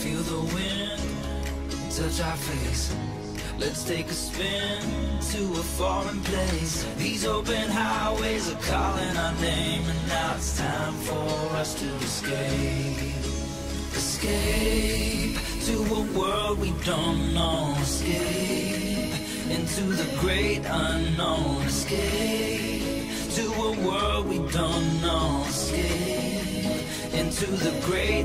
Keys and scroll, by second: 1.7 q.